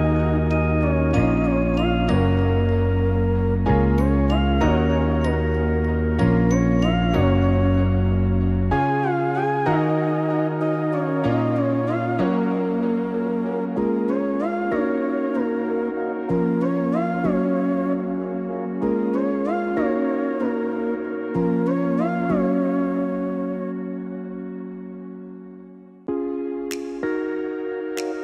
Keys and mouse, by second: 6.6 click, 7.9 click, 9.7-10.8 drag, 12.8 click, 18.5-26.1 drag.